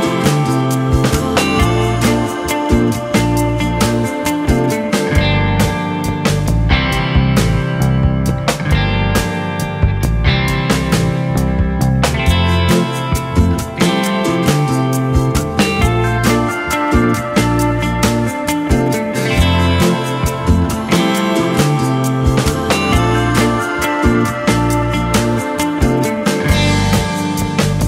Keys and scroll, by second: 4.8 ctrl+h, 6.3 ctrl+t, 16.4 ctrl+h, 16.9 ctrl+t.